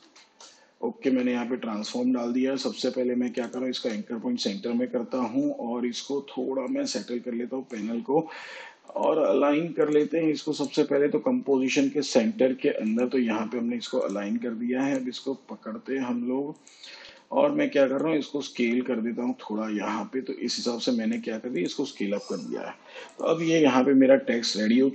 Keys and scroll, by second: 0.0-1.0 typing, 17.0 s.